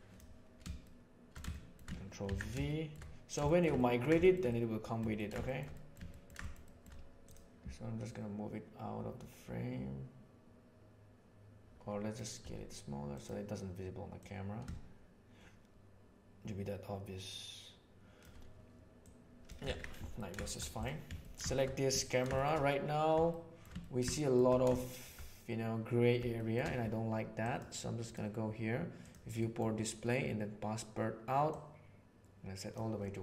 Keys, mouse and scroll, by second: 0.8-1.3 middle drag, 1.5 shift+middle drag, 2.6-3.0 shift+middle drag, 3.4 shift+middle drag, 3.8-5.2 ctrl+shift+middle drag, 5.4 shift+middle drag, 5.7 middle click, 6.1 ctrl+middle click, 6.4 shift+middle click, 6.6 shift+middle drag, 8.0-12.0 drag, 12.4 s, 14.2 click, 15.0-18.1 shift+middle drag, 18.1 shift+right click, 19.0 right click, 19.6 alt+a, 20.1-20.6 shift+middle drag, 20.8 click, 21.2 ctrl+middle click, 22.0 ctrl+middle click, 22.3 middle click, 23.4 shift+middle click, 23.8 ctrl+middle click, 24.1 shift+middle click, 24.8 shift+middle drag, 26.4 shift+middle drag, 27.9 click, 29.0 right drag, 29.4 middle click, 31.5-32.7 right drag.